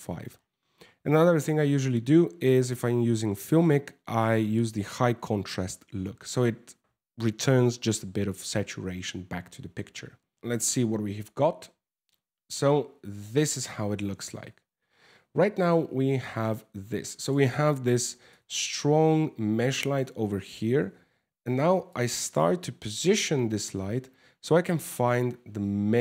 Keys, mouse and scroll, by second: 5.5 scroll up 1, 6.0 scroll down 1, 10.3 shift+z, 10.6 shift+z, 13.2 scroll up 2, 14.4-14.9 scroll down 4, 15.1 middle click, 16.8 right click, 17.6 r, 20.1 g, 22.3 KP_0, 24.4 r.